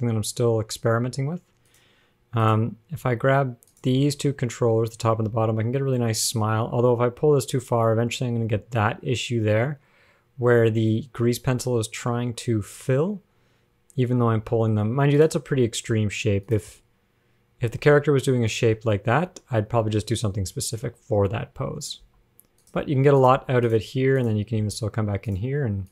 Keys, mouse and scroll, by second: 1.9 click, 2.7 click, 4.0 shift+click, 4.7 scroll down 4, 5.3 scroll up 1, 5.5 g, 15.7-16.1 scroll down 4, 16.1 g, 17.0-17.5 scroll down 1, 17.5 scroll up 3, 17.9 g, 19.3 g, 22.3 g, 23.1 g, 23.6 g, 24.4 click, 25.1 g.